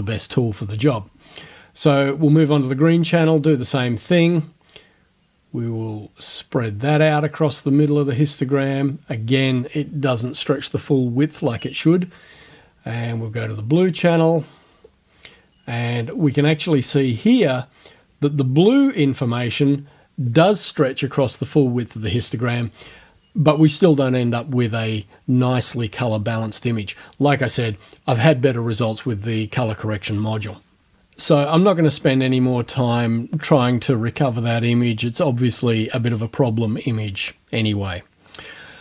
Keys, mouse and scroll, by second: 2.1 scroll down 2, 3.3-9.7 drag, 13.6 scroll down 2, 14.9-20.5 drag, 32.3 click.